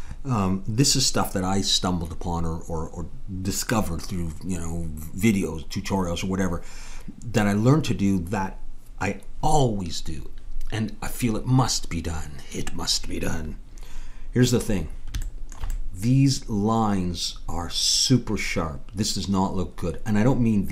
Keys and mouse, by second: 15.3-18.8 middle drag.